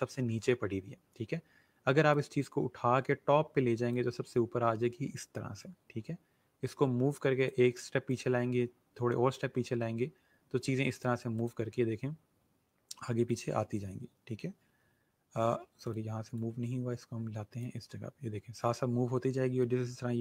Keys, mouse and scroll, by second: 2.1 click, 6.7 click, 13.3 click, 15.8 click.